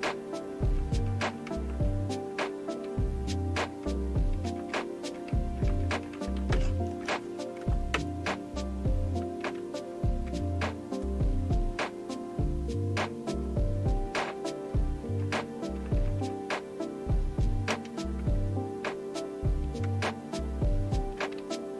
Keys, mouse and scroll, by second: 1.5 Return, 2.8 Down, 3.3 Down, 3.4-3.7 Down, 4.4 Up, 4.7 Up, 5.1 Up, 5.6 Up, 6.0 Up, 6.2 Up, 6.7 Up, 7.0 Return, 9.4 Down, 10.3 Return, 17.7 Return, 19.9 Up.